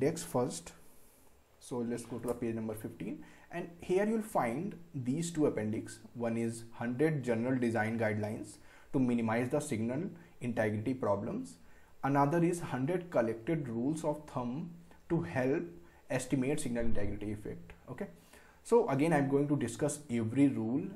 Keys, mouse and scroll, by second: 2.8 scroll up 1, 3.5 scroll down 1.